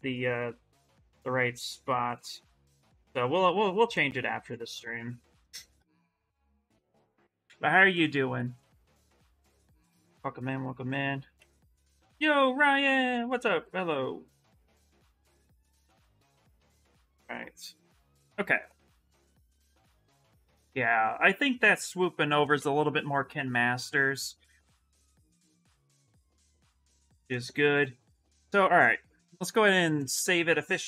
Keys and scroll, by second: 10.6 ctrl+z, 11.1 ctrl+z, 24.4 s.